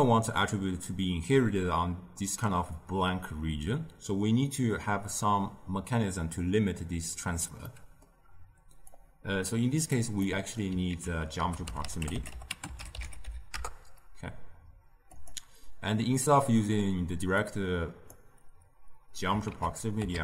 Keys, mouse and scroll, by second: 7.6-8.8 middle drag, 8.8-10.1 drag, 10.1 middle click, 10.8 ctrl+a, 16.3 middle click, 17.3-19.4 drag, 19.4 ctrl+a.